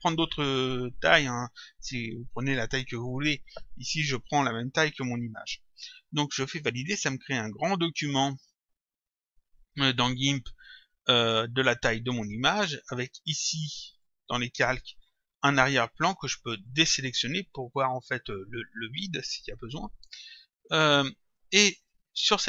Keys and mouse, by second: 6.5 click, 8.6 click, 13.1 click, 16.7 click, 19.3 click, 20.6 click.